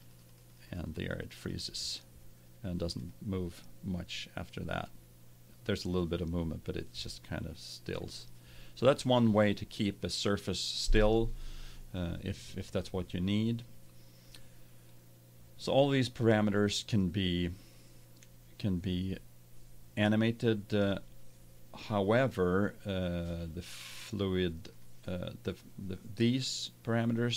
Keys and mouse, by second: 24.7-26.6 drag.